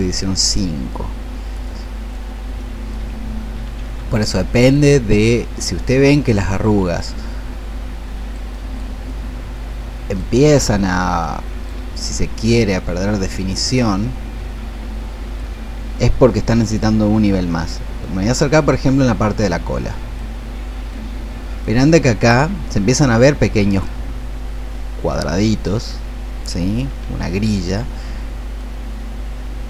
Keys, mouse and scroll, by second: 21.3-29.6 drag.